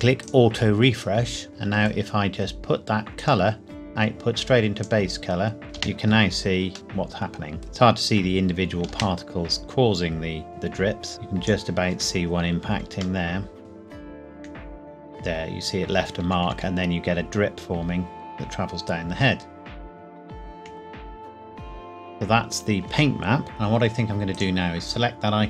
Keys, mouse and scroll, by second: 0.2 click, 1.5 shift+middle click, 2.0 scroll down 2, 3.2 click, 5.7 space, 6.7 middle click, 7.9-8.9 scroll down 1, 8.9 space, 10.5 click, 13.2 middle click, 13.6-14.1 scroll up 1, 14.3 Right, 20.7 Left, 23.4 click, 25.0 click.